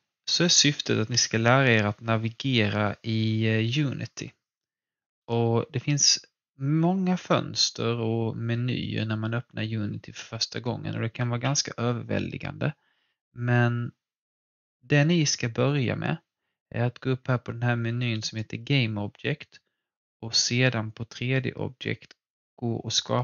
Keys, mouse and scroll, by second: 18.2 click, 18.2 typing.